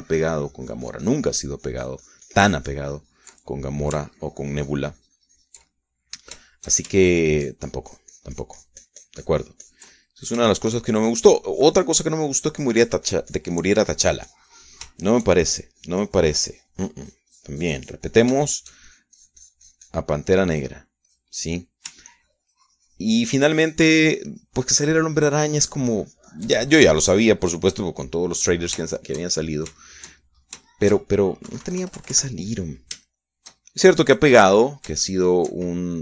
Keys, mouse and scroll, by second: 5.8-8.6 ctrl+drag, 8.8-12.1 ctrl+shift+drag, 12.1 ctrl+shift+middle click, 12.8-16.6 ctrl+shift+drag, 16.7 ctrl+shift+middle click, 17.2-22.1 ctrl+shift+drag, 22.1 shift+middle click, 22.8 click, 23.3 ctrl+middle click, 23.8-28.3 ctrl+drag, 28.4 ctrl+middle click, 28.9 ctrl+click, 29.9 middle click, 30.6-33.2 shift+middle drag, 33.2 KP_Subtract, 34.8-36.0 shift+middle drag.